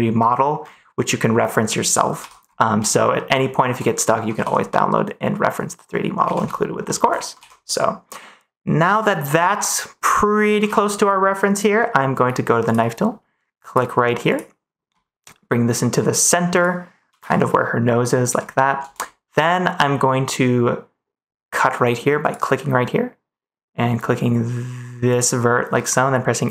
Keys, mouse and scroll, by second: 2.2 ctrl+s, 3.1-4.2 middle drag, 6.8 scroll up 1, 10.6 ctrl+s, 12.6 click, 13.6-17.1 drag, 22.1-26.5 drag.